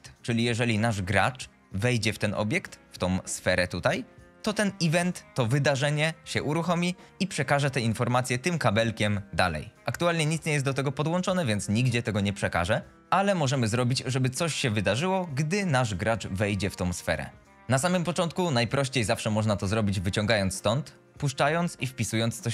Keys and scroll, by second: 22.4-22.5 typing.